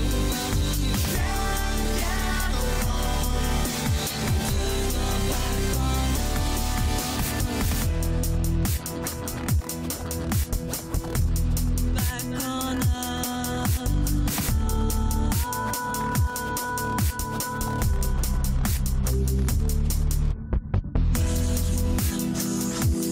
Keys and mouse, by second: 14.4 click, 15.7 click.